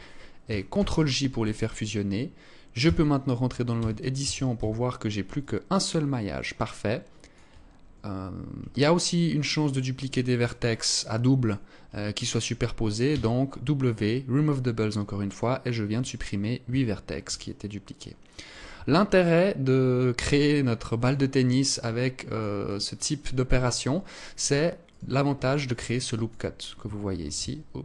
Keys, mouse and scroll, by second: 0.1 ctrl+j, 2.3 Tab, 3.2 a, 3.6 a, 4.0 a, 4.8 alt+click, 8.1 alt+click, 9.0 alt+click, 10.4 alt+click, 12.5 w, 16.1 Tab, 16.8 alt+click, 18.1 Tab, 18.6 alt+click, 20.7 alt+click, 22.1 alt+click, 24.3 alt+right click, 25.1 click, 26.6 shift+c, 27.4 alt+shift+click.